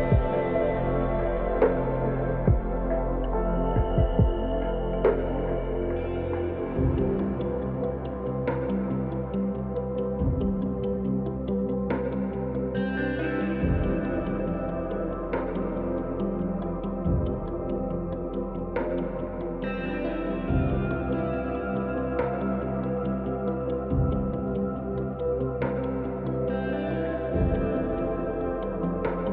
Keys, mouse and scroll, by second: 2.0 shift+click, 2.7 shift+click, 3.4 scroll up 1, 3.5-6.5 middle drag, 6.7 shift+click, 7.3-8.0 scroll down 3, 8.0-10.7 middle drag, 10.7-11.2 scroll up 1, 11.5-12.5 middle drag, 12.5-12.9 scroll up 2, 13.0-14.9 middle drag, 14.9 shift+click, 15.7 shift+click, 16.2-16.7 scroll down 2, 16.7-18.7 middle drag, 18.7 shift+click, 19.7-21.0 middle drag, 21.0-21.3 scroll down 2, 21.5-22.1 scroll up 2, 23.1 ctrl+b.